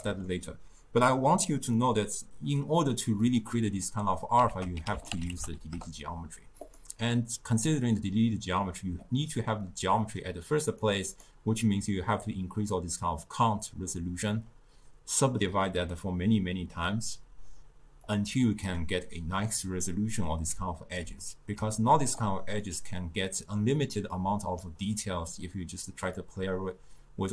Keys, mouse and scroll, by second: 4.6 ctrl+a, 9.7-10.9 middle drag, 10.9 click, 18.1 click, 19.9-20.6 middle drag, 20.6 d, 21.3-22.7 middle drag, 22.7-25.8 drag, 26.2-27.3 drag.